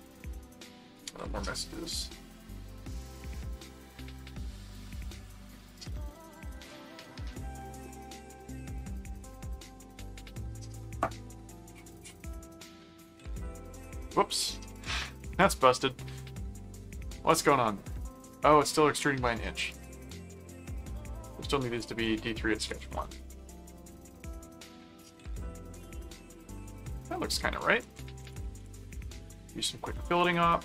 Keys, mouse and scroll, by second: 12.5-14.0 middle drag, 14.7 click, 15.4 click, 18.0-19.0 middle drag, 19.7 click, 20.5-23.5 typing, 24.7-27.4 middle drag, 27.6 click, 27.7-29.1 typing.